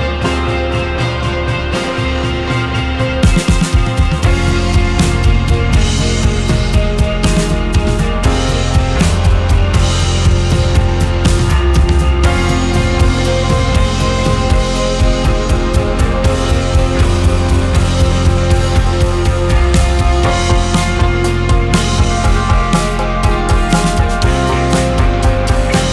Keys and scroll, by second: 2.8 ctrl+k, 3.7 Escape, 4.7 F2, 7.7 ctrl+k, 8.3 Escape, 12.9 c, 13.4 Escape, 14.5 F4.